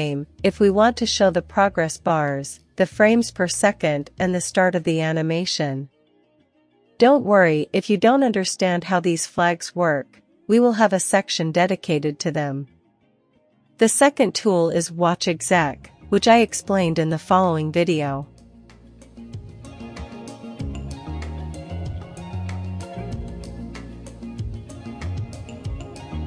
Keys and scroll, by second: 17.1-19.6 typing, 20.7 Return, 21.5 a, 22.6 super+v, 23.6 Escape, 23.9-26.2 typing.